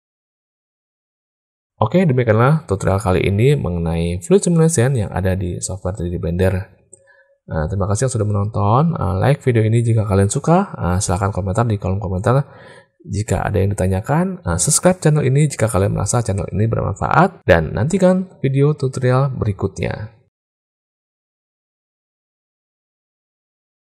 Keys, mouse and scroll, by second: 15.5-18.6 drag.